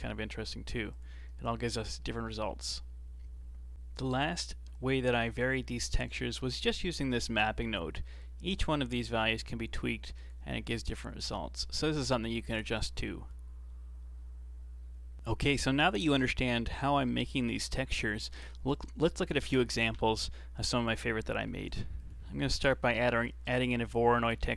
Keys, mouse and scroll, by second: 0.9 drag, 1.4-2.0 scroll down 3, 2.0-2.4 middle drag, 2.4-3.7 scroll down 3, 5.0-5.5 scroll up 2, 5.5-6.7 middle drag, 6.7 scroll up 1, 8.2-11.1 drag, 12.3 click, 15.2 middle click, 15.3 scroll up 3, 15.5 middle click, 16.8-20.5 middle drag, 21.2-21.7 middle drag, 21.7 shift+a.